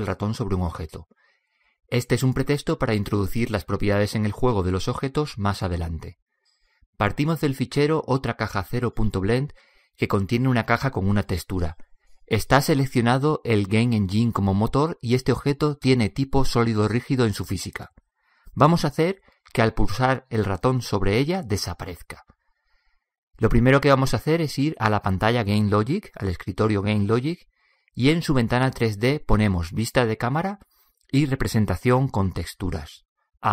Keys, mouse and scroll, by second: 10.5-12.5 middle drag, 16.5-18.3 drag, 24.5-26.3 drag, 30.8 KP_0, 33.4 alt+z.